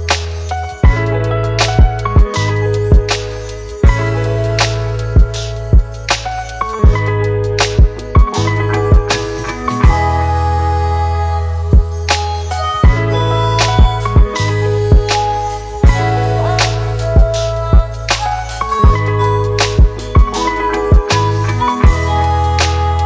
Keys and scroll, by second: 0.0-2.7 typing, 4.4 Return.